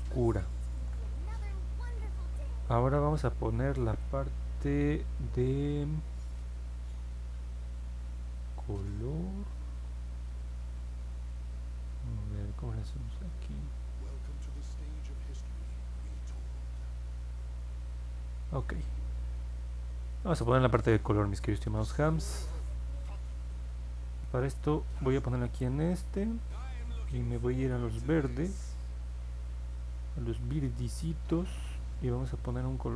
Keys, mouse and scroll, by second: 1.0 middle click, 1.4 middle click, 1.9 middle click, 2.5 middle click, 2.9-4.0 alt+drag.